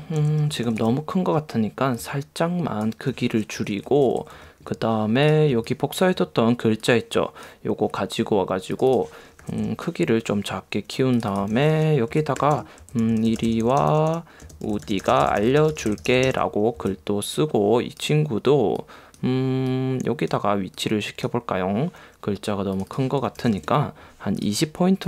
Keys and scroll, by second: 3.7 Right, 5.6 space, 9.5 3, 12.3 d, 14.5 space, 16.9 v, 23.5 2.